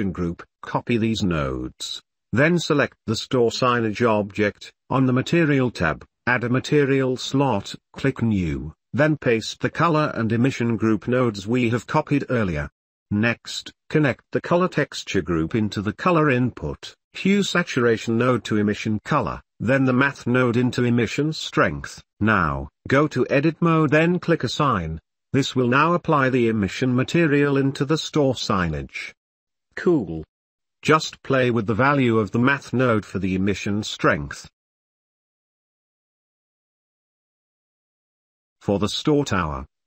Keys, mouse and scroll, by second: 1.0 w, 2.9 click, 3.3 shift+middle click, 7.9 drag, 8.9 drag, 11.6 w, 13.7 click, 16.4 click, 16.9 middle click, 17.9 middle click, 19.1-19.7 drag, 19.7 middle click, 19.9 click, 20.6-21.7 drag, 22.4 Tab, 23.6 click, 24.1 click, 26.1 Tab, 26.9-28.6 middle drag, 30.4-31.7 middle drag, 30.4 n, 32.6 middle click, 33.1-36.9 drag, 37.6-38.7 middle drag, 39.0 k.